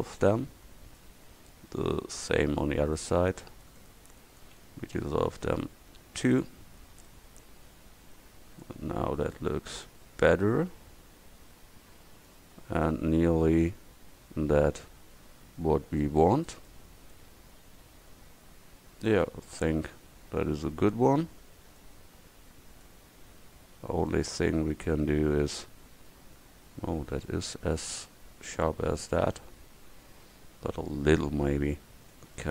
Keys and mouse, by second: 4.9 x, 6.9 Tab, 12.3-14.0 middle drag, 14.4-14.8 middle drag, 14.9 middle click, 15.2 middle click, 15.4 middle click, 16.3 middle click, 21.3-22.0 middle drag, 22.6-23.2 middle drag, 24.7 middle click, 24.9-25.2 middle drag, 27.3 middle drag, 27.5 middle click, 27.7 middle drag, 27.9-29.5 middle drag, 29.9 middle click, 30.4 Tab, 31.3 a, 31.7 a, 32.4 c.